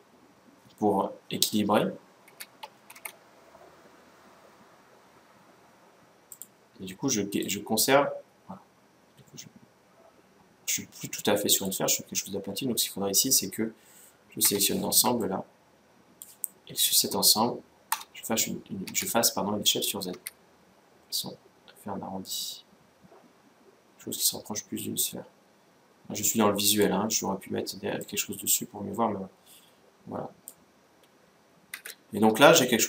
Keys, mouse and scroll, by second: 2.0 s, 7.2-8.8 drag, 14.2 z, 14.7 b, 17.7 z, 18.7 s, 27.8-29.5 drag, 30.7-32.6 middle drag, 31.6 Tab.